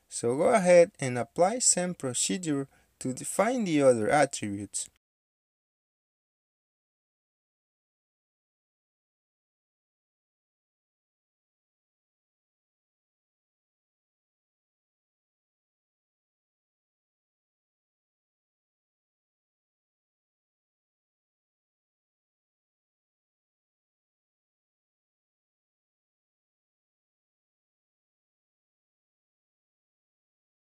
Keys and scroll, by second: 0.0-1.8 typing, 6.7-7.8 typing, 9.8-11.7 typing, 30.2 ctrl+z.